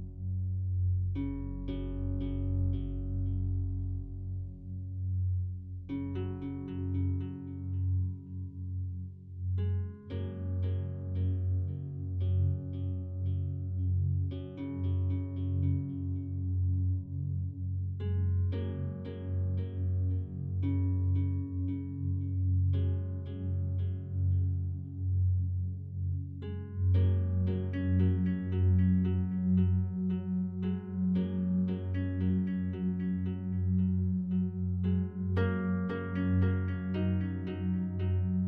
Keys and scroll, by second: 1.3 ctrl+z, 9.9 ctrl+z, 14.0 ctrl+z, 16.1 ctrl+t, 24.2 ctrl+z.